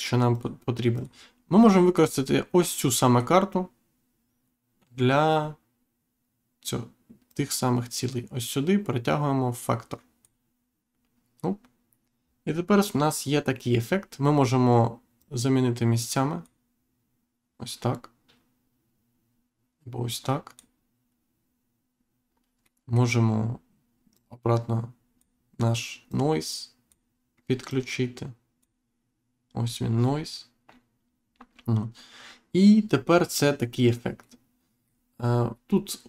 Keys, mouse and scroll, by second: 0.9 click, 1.5 scroll down 1, 2.9 middle click, 7.2 click, 13.9-14.6 scroll up 1, 15.1 click, 20.0 click, 22.6 middle click, 24.1 click, 26.0 click, 27.6 click, 33.7-34.1 scroll down 1, 34.1 middle click, 35.1-35.5 scroll up 1.